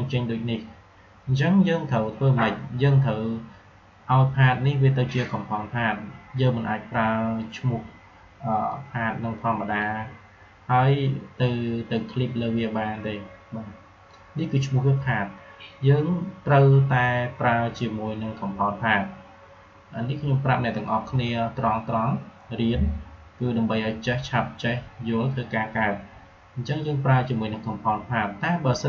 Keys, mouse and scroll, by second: 8.6-11.9 drag, 11.9-16.4 drag.